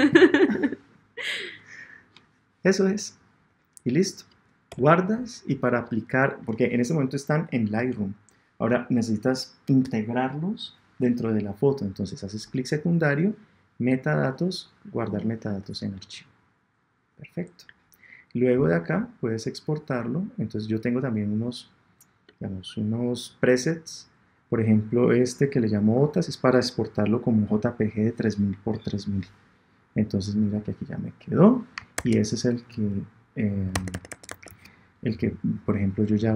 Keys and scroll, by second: 4.6 Return, 31.9 super+Tab, 33.7 super+Tab.